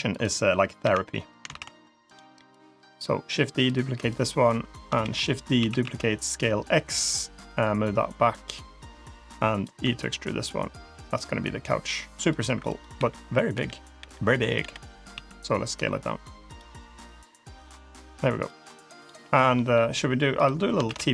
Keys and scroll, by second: 0.7 l, 1.3 shift+d, 4.9 shift+d, 5.4 s, 9.7 e, 12.8 l, 13.4 l, 13.8 l, 15.0 s, 20.7 shift+d.